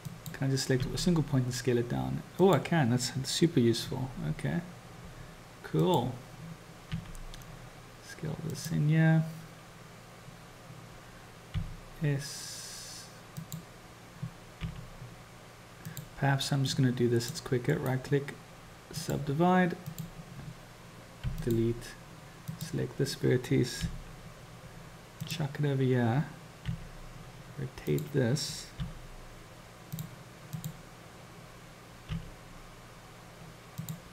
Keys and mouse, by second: 0.2 click, 0.9 s, 11.5 s, 16.8-17.5 drag, 17.8-19.2 drag, 19.9 click, 21.2 x, 22.5 click, 23.8 g, 26.7 r, 28.9 g, 30.6 click, 32.1 r.